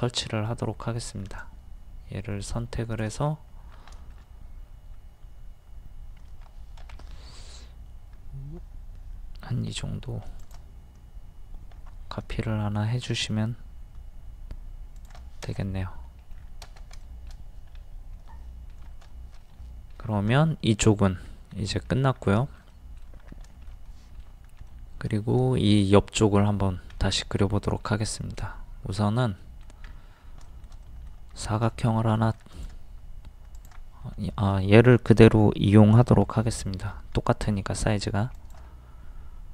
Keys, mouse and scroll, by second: 1.4 click, 3.5 scroll down 1, 4.0 shift+middle click, 4.9 scroll up 1, 6.8 m, 10.4 shift+click, 15.0 shift+click, 15.6 middle click, 16.4 scroll down 1, 17.0-19.5 shift+middle drag, 20.0 scroll down 1, 21.6 middle click, 23.5 shift+middle click, 24.6 scroll up 1, 24.7 middle click, 25.5-29.2 shift+middle drag, 29.9 scroll up 1, 31.2 middle click, 31.4 scroll up 1, 31.7 shift+middle click, 32.5 click, 34.3 shift+middle click, 34.3 shift+scroll, 36.2 m, 38.4 ctrl+click.